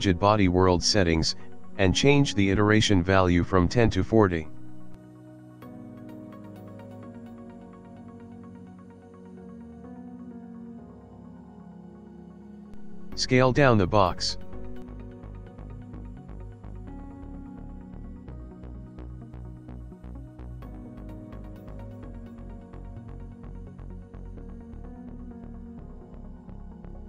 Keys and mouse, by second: 0.9 click, 6.5 click, 7.0 middle click, 8.3 click, 8.8 s, 9.6 click, 11.3 click, 11.9 click, 12.5 s, 16.6 s, 18.4 middle click, 19.9 click, 20.4 click, 23.3 click, 24.5 middle click, 25.1 middle click, 26.3 shift+middle click, 26.4 shift+middle click.